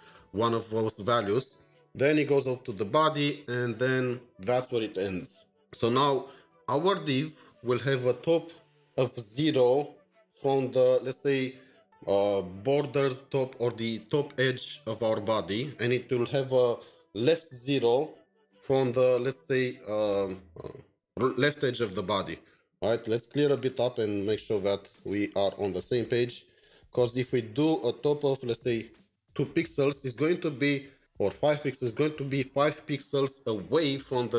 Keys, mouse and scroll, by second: 23.5 click, 23.6 ctrl+shift+4, 23.9 ctrl+shift+7, 25.6 ctrl+shift+2, 29.0 Up, 29.0 Up, 30.8 Up, 31.0 Up.